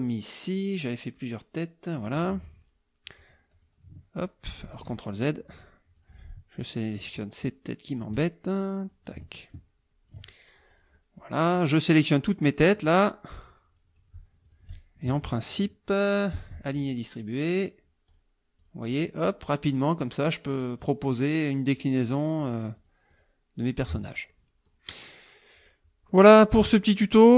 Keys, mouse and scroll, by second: 2.0 click, 3.6-4.8 ctrl+drag, 4.7 ctrl+z, 5.2 ctrl+click, 6.0 click, 6.9 shift+click, 7.9 shift+click, 8.9-10.3 ctrl+drag, 10.7-11.4 drag, 11.0 right click, 11.9-13.7 drag, 14.4 shift+click, 16.3 ctrl+shift+a, 18.1 click, 18.6 click, 18.9 click, 21.8 click, 22.8 click, 23.1 click, 24.3 click, 25.6 click, 26.1 middle click, 27.0 click.